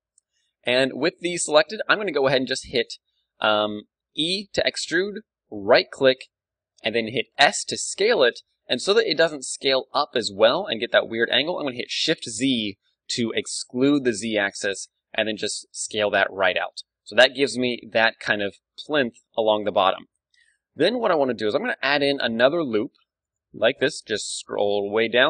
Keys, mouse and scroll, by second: 4.2 e, 7.2 right click, 7.3 s, 16.5-18.1 drag, 16.6 Tab, 17.0-21.4 middle drag, 18.2 KP_1, 20.1 Tab, 22.9 ctrl+r.